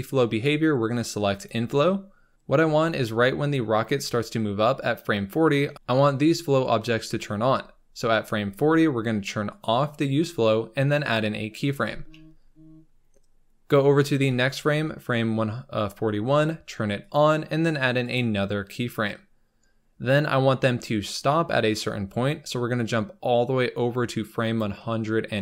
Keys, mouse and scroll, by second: 2.3-2.9 scroll up 3, 9.4-14.1 drag, 14.1 Right, 16.9-25.4 drag.